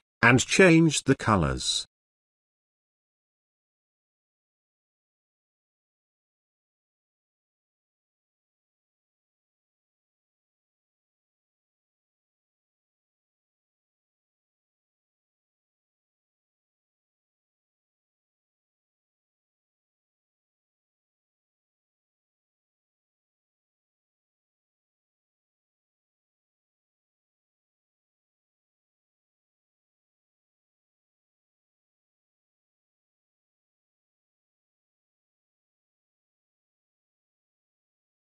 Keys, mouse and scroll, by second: 1.4 scroll down 1, 3.9-4.4 scroll up 1, 4.4-5.2 scroll down 1, 6.2 click, 14.0 click, 16.6-17.9 drag, 25.4 right click, 26.5 click, 31.0-32.2 drag.